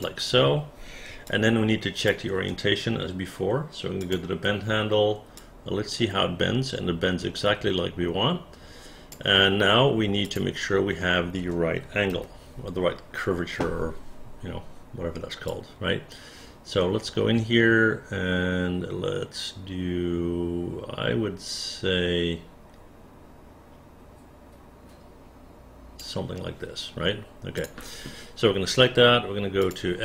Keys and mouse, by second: 1.3 alt+click, 5.4-9.1 drag, 10.2 click, 11.4 space, 11.7 space, 12.2 f, 15.5-26.0 drag, 27.6 click.